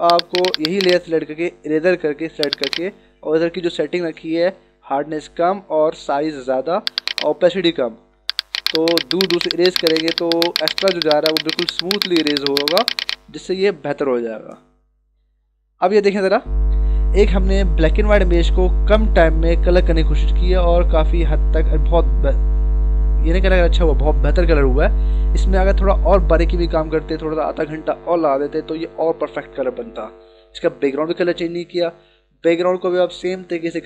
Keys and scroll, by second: 1.6 e, 14.1 ctrl+-.